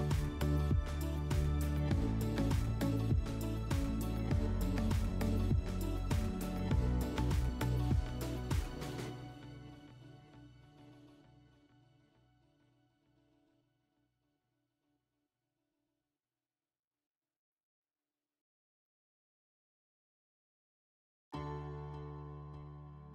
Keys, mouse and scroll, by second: 1.2 click, 2.8 click, 4.2 alt+w, 7.6-8.0 alt+middle drag, 8.7 click, 13.8 click, 14.7 click, 15.0 click, 15.6 click.